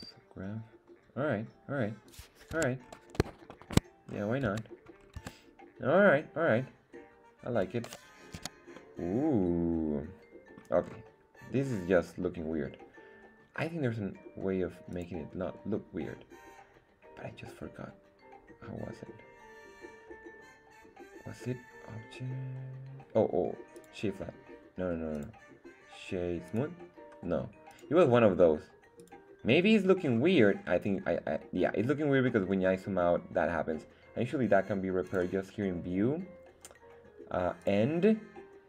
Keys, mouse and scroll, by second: 2.1 click, 2.5 Tab, 2.8 scroll down 2, 3.5 shift+middle drag, 4.0 scroll up 1, 4.5 Tab, 5.0 scroll down 1, 5.2 Tab, 8.3 z, 8.7-10.6 middle drag, 10.8-11.4 scroll up 2, 11.6 scroll down 1, 14.9-23.9 drag, 25.1-26.6 drag, 27.7-29.1 drag, 29.7 scroll down 2, 30.0-30.5 scroll up 2, 30.5-31.1 scroll down 4, 31.3-32.0 scroll up 1, 32.1-32.5 scroll up 1, 32.8 scroll up 1, 32.9 scroll down 2, 33.3 scroll up 1, 35.0 click, 37.6-38.6 drag.